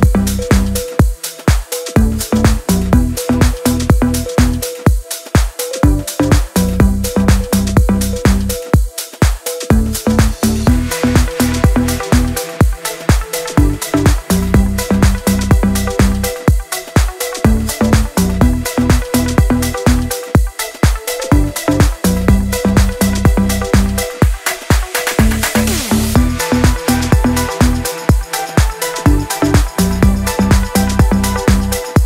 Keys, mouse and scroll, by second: 3.1 ctrl+a, 4.5 click, 5.5 ctrl+d, 5.7 click, 17.7 click, 20.2-24.7 alt+drag, 25.8 shift+click, 28.3-32.0 alt+drag.